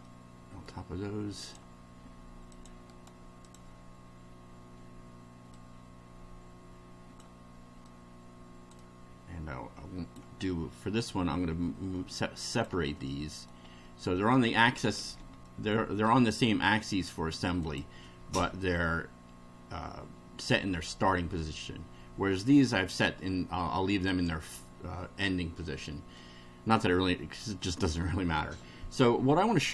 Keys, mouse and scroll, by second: 0.0-0.8 middle drag, 1.4 click, 2.5 click, 2.9 right click, 3.4 click, 5.5-7.4 drag, 7.9-10.3 drag, 11.1-12.8 drag, 12.9 middle click, 13.7 scroll down 1, 14.6 shift+middle click, 15.4 shift+middle click, 17.6 click, 24.1 click, 25.7 shift+middle click.